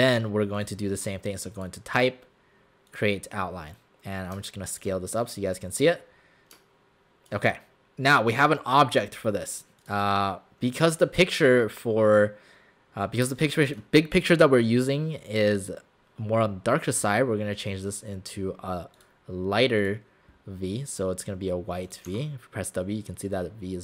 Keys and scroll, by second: 13.3 space.